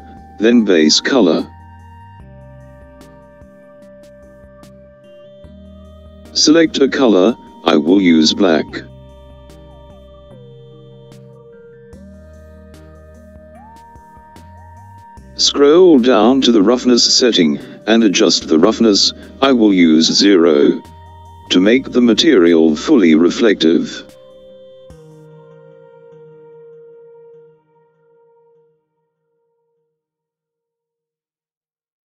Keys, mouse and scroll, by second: 1.9-5.5 drag, 14.5-16.5 scroll down 3, 16.8-19.8 scroll down 1, 19.8-21.7 scroll down 1, 21.7-23.5 scroll down 2, 23.5-27.2 scroll up 2, 27.2-31.0 drag.